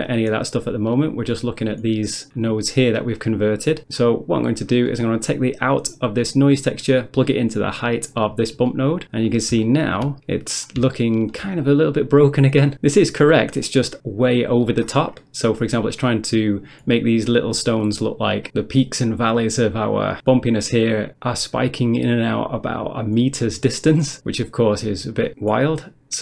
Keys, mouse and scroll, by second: 0.1 middle click, 0.3 scroll down 1, 0.5 middle click, 0.9 middle click, 2.3 click, 3.2 click, 3.8 middle click, 4.2 middle click, 4.4 scroll up 1, 4.9 middle click, 5.1 middle click, 6.1 click, 8.0 click, 8.7 middle click, 9.0 middle click, 9.3 scroll up 1, 9.7 shift+middle click, 10.3 scroll up 1, 11.0 shift+middle click, 11.6 scroll up 1, 13.7 middle click, 14.9 scroll up 1, 15.6 middle click, 15.8 middle click, 16.0-16.4 scroll up 1, 17.0 scroll down 1, 18.5 click, 19.3 ctrl+middle click, 19.8 ctrl+scroll down 1, 19.9 ctrl+scroll up 1, 20.1-20.4 scroll down 1, 20.4 ctrl+scroll up 1, 20.8-21.1 scroll down 1, 21.5-21.9 scroll up 1, 21.9 middle click, 22.2 middle click, 22.4 middle click, 23.5 middle click, 24.1 middle click.